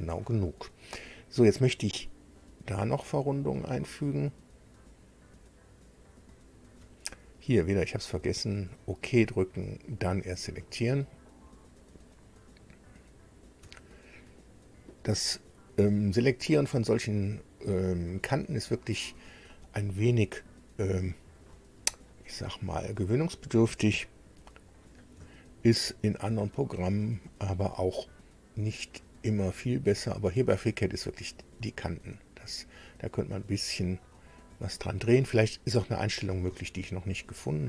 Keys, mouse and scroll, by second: 0.0 scroll down 2, 3.0 click, 6.0 ctrl+click, 8.4 click, 10.2 click, 14.0-14.4 ctrl+scroll up 2, 17.1 ctrl+click, 18.8 ctrl+click, 19.4-21.2 ctrl+middle drag, 21.4 shift+middle click, 22.9 shift+scroll down 3, 24.0 shift+middle click, 27.0 ctrl+click, 30.6 ctrl+scroll up 2, 31.2 scroll up 1, 33.4 ctrl+click, 34.1-35.2 ctrl+drag, 35.4 shift+click.